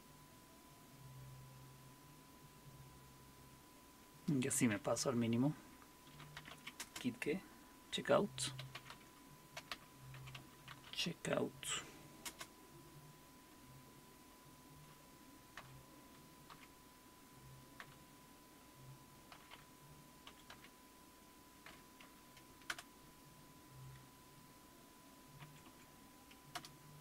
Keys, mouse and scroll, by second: 6.0-7.0 typing, 8.4-12.3 typing, 15.6-17.8 typing, 19.3-21.7 typing, 22.7 Return, 22.7 typing, 25.4 Up, 25.8 Up, 26.5 Return.